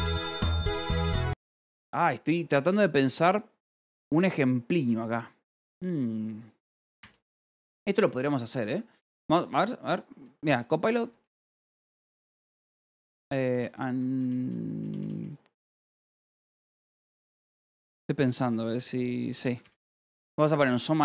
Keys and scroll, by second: 7.4 Return, 7.7 Escape, 7.9-9.2 typing, 10.3-14.7 typing, 16.1 n, 18.6-20.5 typing.